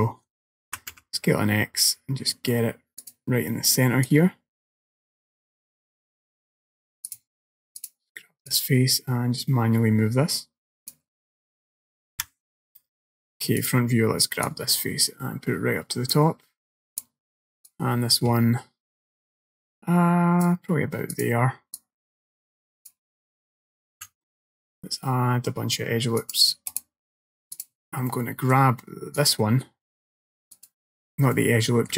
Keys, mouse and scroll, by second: 0.7 s, 4.1 click, 7.8 click, 8.5 click, 11.3 middle click, 12.2 KP_1, 13.7 click, 14.5 click, 17.5 click, 17.7 click, 21.2 click, 21.8 click, 24.0 ctrl+r, 27.6 click, 28.2 middle click, 29.2 click, 30.6 click, 31.4 middle click.